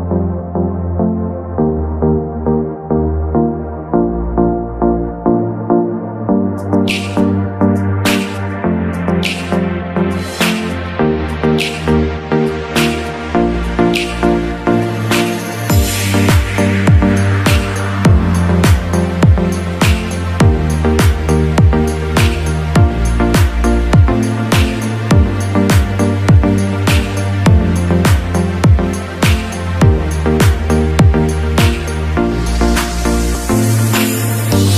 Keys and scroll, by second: 6.1 shift+space, 12.1 shift+space, 19.5 Up, 20.3 Right, 20.7 Up, 23.8 shift+space.